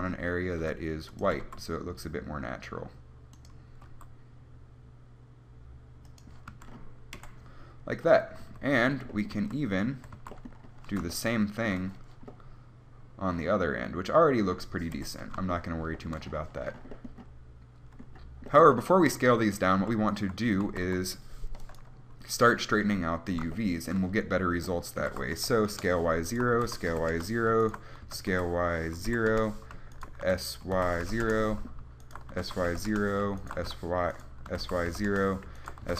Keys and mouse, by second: 0.9 s, 1.5 g, 4.1 r, 6.7 a, 7.4 KP_1, 8.6 a, 10.1 a, 15.2 KP_1, 20.8 s, 25.2 s, 26.0 click, 26.8 s, 28.2 s, 30.5 s, 32.6 s, 33.8 s, 34.7 s.